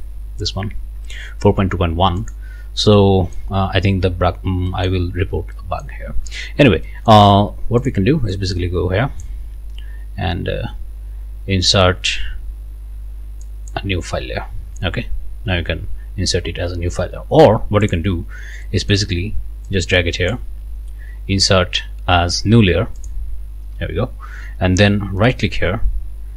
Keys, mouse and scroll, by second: 2.2 click, 2.9 right click, 4.0 scroll up 1, 4.3 scroll down 1, 4.7 middle click, 5.5 middle click, 6.9 middle click, 7.9 click, 8.3-9.4 drag, 13.4 click, 17.9 click, 18.6 right click, 19.7 click, 23.0-25.3 drag, 25.3 right click.